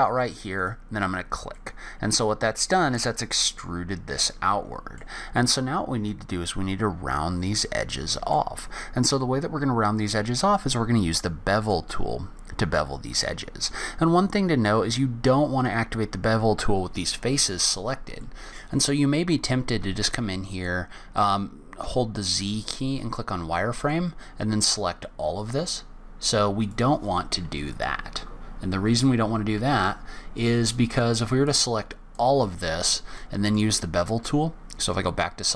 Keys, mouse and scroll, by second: 1.5 middle click, 5.3-6.1 scroll up 4, 6.1 middle click, 8.5-9.1 scroll down 2, 9.1 scroll down 1, 9.7-10.5 scroll up 2, 10.5 middle click, 12.6-13.6 scroll down 8, 13.6 middle click, 15.3-16.1 scroll up 4, 16.1 scroll down 2, 16.8-18.2 scroll up 1, 18.2 middle click.